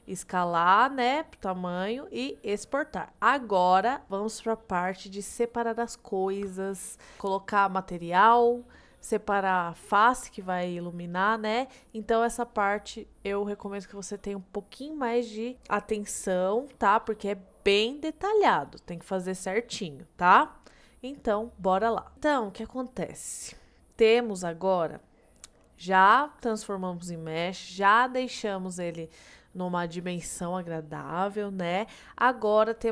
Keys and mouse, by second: 22.1-23.9 middle drag, 24.4-25.1 middle drag, 26.0-26.3 middle drag, 31.2-32.9 middle drag.